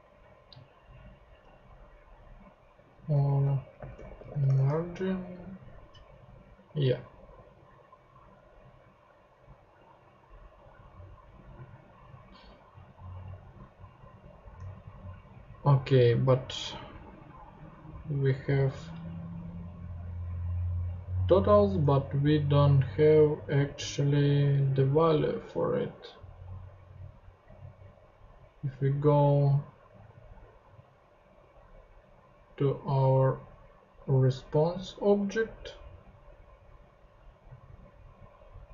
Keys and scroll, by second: 3.5-4.8 typing.